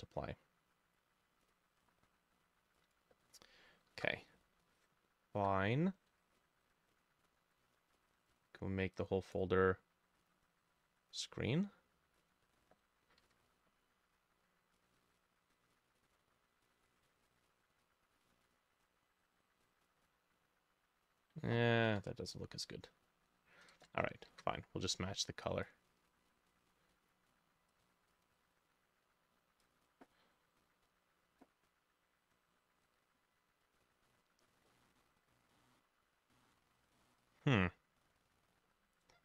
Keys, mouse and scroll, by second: 3.4 ctrl+middle click, 4.2 ctrl+u, 5.4 Escape, 13.3 ctrl+u, 21.9 Escape, 24.3 ctrl+u, 34.5 scroll down 1, 34.7 middle click, 35.6 middle click, 37.0 middle click, 37.6-39.2 scroll up 1.